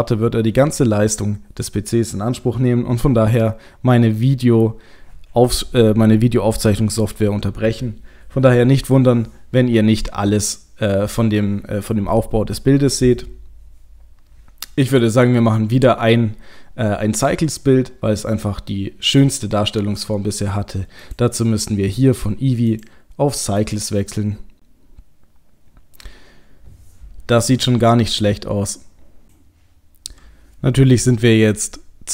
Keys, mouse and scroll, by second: 21.0 click, 22.7 click.